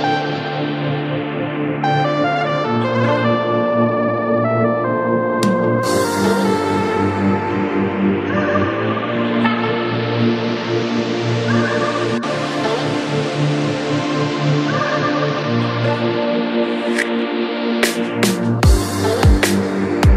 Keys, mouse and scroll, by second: 0.4-0.8 scroll up 3, 0.8 shift+middle click, 1.2-2.3 scroll up 5, 1.4 shift+middle click, 2.3 g, 5.4 scroll down 8, 5.6 shift+middle click, 6.0 scroll down 1, 6.3 e, 7.6 shift+s, 9.8-10.2 scroll down 1, 10.2 shift+middle click, 10.7 g, 12.0-12.5 scroll up 8, 12.5 shift+middle click, 12.9 scroll up 2, 13.2 shift+middle click, 13.4-14.3 scroll up 1, 14.3 g, 16.3-17.1 scroll down 13, 17.1 shift+middle click, 17.3-17.9 scroll up 5, 17.9 shift+middle click, 18.4-19.6 scroll down 2, 19.6 Tab.